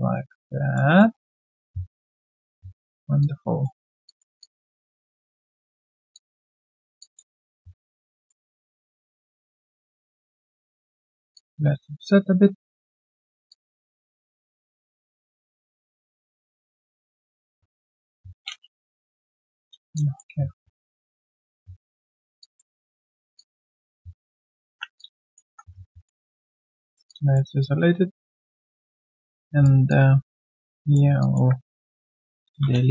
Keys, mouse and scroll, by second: 0.1 alt+middle click, 0.4 alt+click, 1.0 alt+middle click, 1.3 alt+click, 1.9 right click, 1.9 q, 3.1 right click, 3.2 alt+click, 3.6 alt+middle click, 4.4 alt+click, 6.1 alt+click, 6.6 ctrl+click, 7.0 alt+click, 7.7 shift+right click, 11.3 alt+click, 16.1 middle click, 19.9 alt+click, 20.3 alt+w, 21.4 shift+click, 22.4 alt+click, 22.9 right click, 23.3 alt+click, 24.1 right click, 24.6 ctrl+1, 24.9 alt+click, 25.4 ctrl+1, 25.7 right click, 26.7 ctrl+1, 27.0 alt+click, 29.3 right click, 31.2 alt+click, 31.7 ctrl+click.